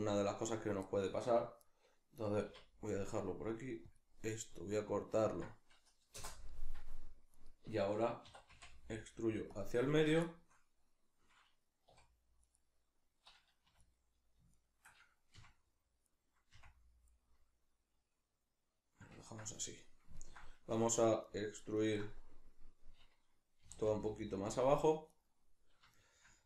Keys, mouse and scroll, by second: 2.5 k, 7.3 right click, 8.3 e, 9.6 click, 10.3-12.5 shift+middle drag, 11.9 3, 12.5 right click, 13.7 2, 13.8 right click, 14.5 shift+right click, 15.3 f, 16.1 right click, 16.5 f, 17.3-21.3 middle drag, 20.7 1, 21.3 right click, 22.1-24.6 middle drag, 23.7 g, 24.6 click, 25.1 right click, 25.9-26.4 shift+middle drag.